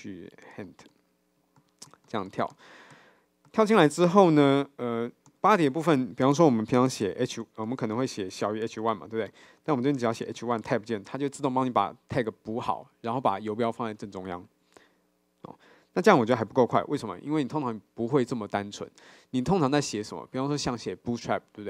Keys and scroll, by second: 5.3 Tab, 10.6 Tab.